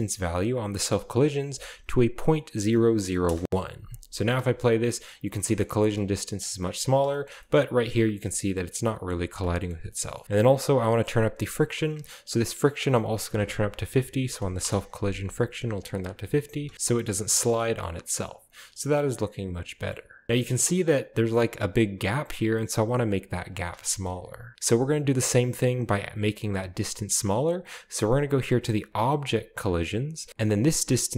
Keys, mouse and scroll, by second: 1.3 0, 2.6 1, 3.3 Return, 4.2 space, 5.2-6.3 middle drag, 5.2-6.0 scroll up 1, 5.4 space, 5.8 space, 6.4-6.9 drag, 6.8 space, 6.9-7.5 scroll down 1, 7.0-8.4 shift+middle drag, 7.5-8.4 shift+scroll up 1, 10.2 shift+middle click, 10.2 scroll up 1, 12.7 click, 14.2 typing, 14.6 Return, 15.7 click, 16.2-16.9 scroll down 1, 16.5 space, 16.9-17.6 drag, 17.9-18.6 middle drag, 18.5-18.8 drag, 18.8-19.6 scroll down 1, 20.0-21.5 middle drag, 20.0-21.5 scroll up 1, 20.3 space, 23.4-24.6 middle drag, 23.4-24.3 scroll down 2, 25.0-26.8 scroll up 2.